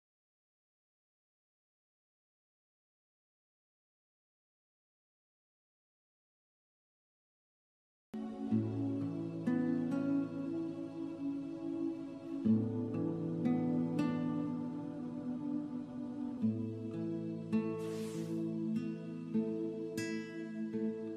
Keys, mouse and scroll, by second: 0.0 click, 5.1 click, 8.3 click.